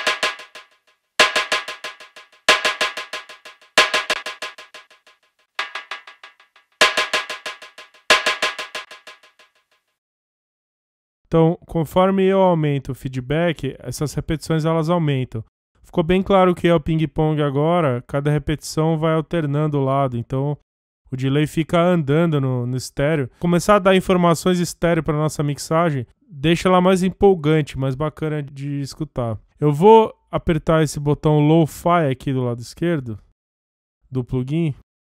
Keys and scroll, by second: 3.9 space, 5.5 space, 8.8 space, 33.3 F1.